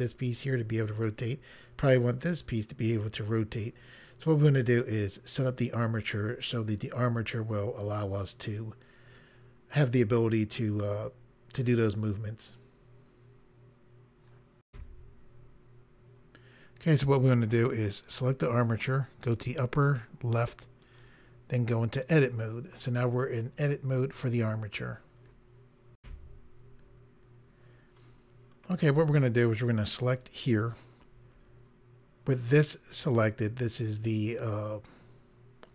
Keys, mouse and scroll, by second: 14.7 Pause, 18.0 click, 20.8 click, 22.0 click, 26.0 Pause, 27.9 scroll up 1, 28.4 scroll up 1, 30.0 click.